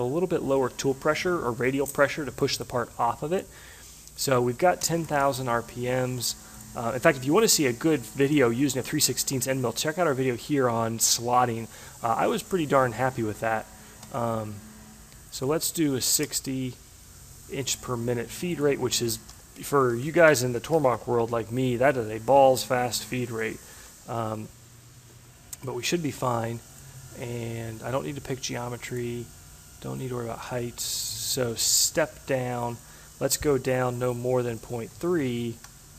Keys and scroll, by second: 4.4 0, 6.3 BackSpace, 13.6 0, 15.8-16.7 typing, 20.1 ctrl+c, 20.2 Tab, 20.7 ctrl+v, 20.9 Tab, 21.2 ctrl+v, 21.5 Tab, 23.0 0, 23.2 Tab, 23.5 0, 23.8 Tab, 34.1 Delete, 34.9 3.